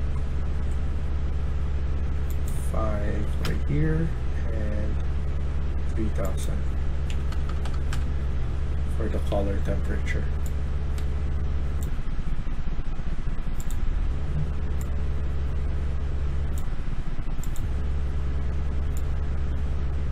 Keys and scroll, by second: 2.8-3.6 typing, 6.8-7.5 typing, 7.8 Return, 12.9 typing.